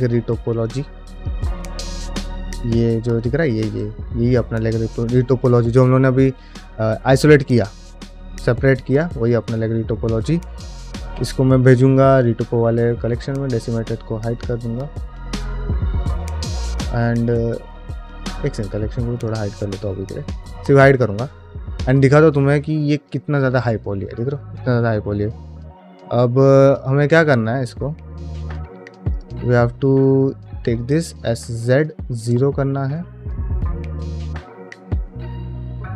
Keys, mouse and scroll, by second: 1.0 click, 1.8 g, 5.1 g, 11.0 m, 13.4 click, 19.1 click, 19.8 shift+middle drag, 20.1 middle drag, 20.5 middle drag, 20.9-22.0 scroll up 2, 21.4 Tab, 22.0 middle click, 22.4-22.8 scroll up 2, 22.8 alt+middle click, 23.3 shift+middle click, 23.6-24.0 scroll up 1, 24.6 scroll down 1, 25.7 KP_Divide, 25.7-26.3 scroll down 1, 26.3 middle click, 26.8 shift+middle click, 27.1 middle click, 27.6 scroll up 1, 27.9 shift+middle click, 28.3 2, 29.0 alt+click, 30.3 s, 32.9 middle click, 34.5 alt+middle click, 34.7-35.1 scroll up 3, 35.1 shift+middle click.